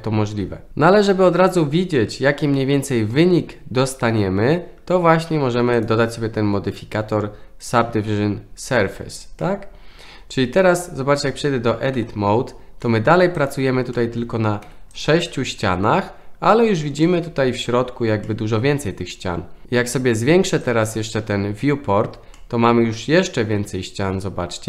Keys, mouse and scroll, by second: 5.8-7.6 drag, 9.4-10.4 middle drag, 11.9 Tab, 12.8-13.1 middle drag, 13.9 middle drag, 14.6 3, 14.9 click, 15.3-16.0 middle drag, 17.0 middle click, 18.2-19.0 middle drag, 20.6 click, 22.3-24.6 middle drag.